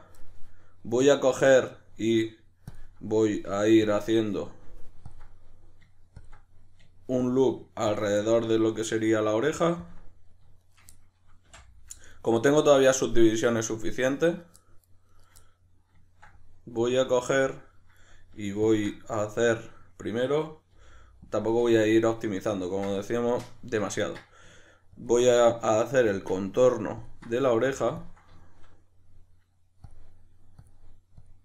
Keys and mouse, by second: 2.7-3.0 ctrl+drag, 3.0-3.8 middle drag, 3.8 ctrl+drag, 4.1-5.1 middle drag, 5.1 ctrl+click, 5.3-6.2 middle drag, 6.2 ctrl+drag, 6.4-7.2 middle drag, 7.2-8.2 ctrl+drag, 8.2-9.8 shift+middle drag, 9.8 ctrl+click, 10.0-10.6 middle drag, 10.6 shift+right click, 11.0-12.1 middle drag, 11.5 f, 12.1 right click, 12.4-13.4 shift+middle drag, 13.4 right click, 14.2 right click, 14.6-15.1 middle drag, 15.1 right click, 15.4-18.6 middle drag, 18.6-18.9 ctrl+drag, 18.9-21.3 middle drag, 20.7 g, 21.3 click, 21.7-25.0 middle drag, 25.0-28.4 ctrl+drag, 28.4-29.9 shift+middle drag, 29.9 ctrl+click.